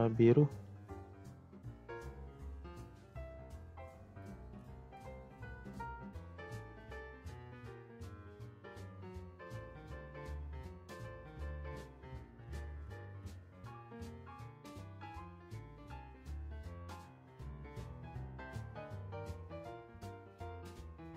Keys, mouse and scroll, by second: 10.0 click, 10.4 click, 10.7 click, 11.5-13.2 drag, 13.6-15.1 drag, 15.6 click, 16.4-17.0 drag, 17.0 space, 18.1 space, 19.0-20.3 drag.